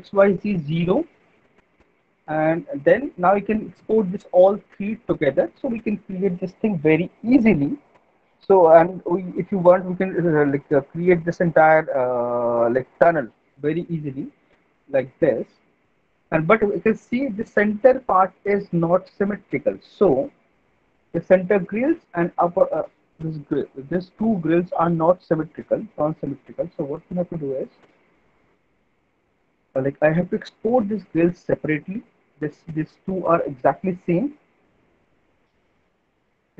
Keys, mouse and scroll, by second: 2.0 alt+middle click, 2.8 middle click, 3.6 alt+middle click, 14.8 alt+middle click, 16.1 middle click, 21.7 alt+middle click, 22.3 middle click, 24.3 alt+middle click, 25.4 middle click, 26.0 alt+middle click, 26.9 middle click, 27.2 scroll, 28.0 alt+middle click, 36.0 alt+middle click.